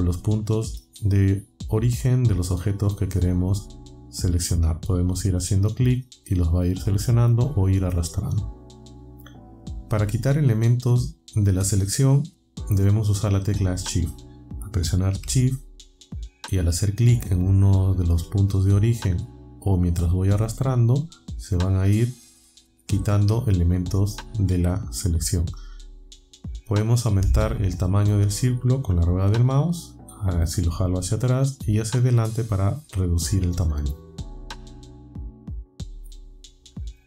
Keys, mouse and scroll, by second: 2.7 click, 4.0 click, 6.0 click, 7.4-9.2 drag, 17.0 shift+click, 18.5-22.7 shift+drag, 29.3-29.8 scroll up 2, 30.0 scroll down 2, 30.6 scroll down 2, 31.3-31.6 scroll down 2, 32.4-32.9 scroll down 2, 33.6-34.1 scroll up 2, 34.3-35.0 scroll up 4, 35.3 scroll down 2, 35.5-36.1 scroll up 4.